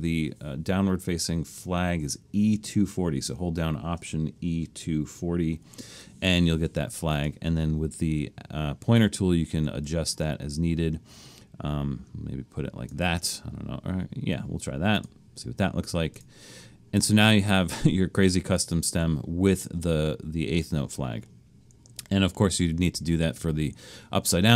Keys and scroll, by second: 4.4 alt+e, 4.9 alt+2, 5.1 alt+4, 5.5 alt+0.